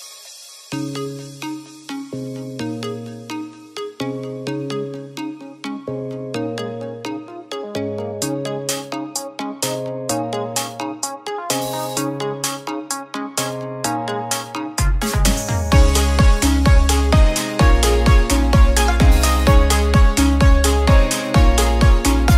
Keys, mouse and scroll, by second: 1.5 shift+d, 2.1-3.5 middle drag, 3.5 click, 5.4 click, 7.0-8.4 middle drag, 8.4 r, 12.7 shift+d, 13.3-14.3 middle drag, 14.3 click, 16.9-18.2 middle drag, 18.2 click, 19.3 l, 20.4 shift+d, 21.4 click.